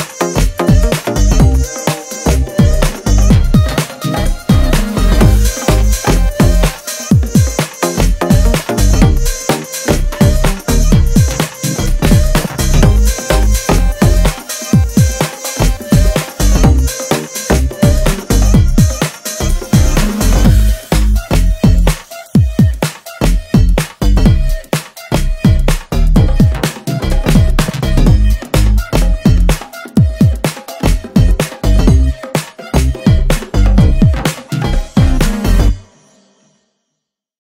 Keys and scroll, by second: 0.8 space, 1.2 Tab, 1.6 Tab, 2.5 g, 2.8 g.